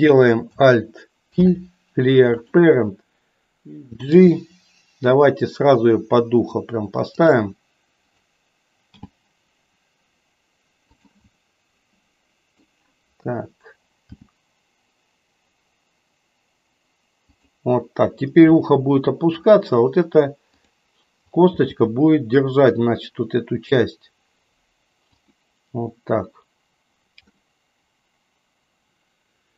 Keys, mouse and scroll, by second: 1.3 alt+p, 4.0 g, 8.9 g, 11.3-12.8 middle drag, 14.0 g, 18.5-19.5 middle drag, 20.5 click, 21.5 g, 27.4-29.5 middle drag.